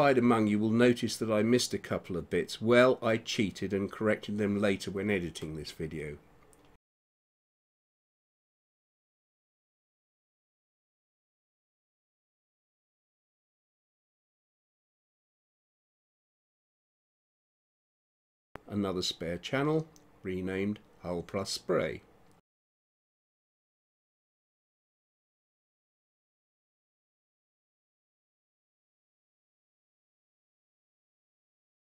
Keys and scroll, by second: 0.0 ], 1.4 space, 3.6 space, 10.2 ctrl+0, 25.7 ctrl+h, 27.4 shift+h, 27.7 u, 28.3 l, 29.9-31.9 typing.